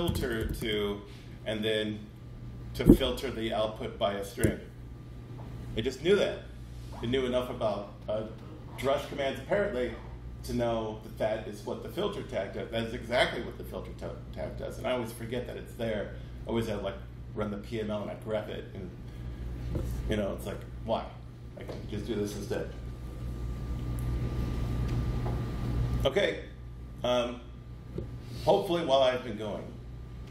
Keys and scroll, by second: 4.2 Tab.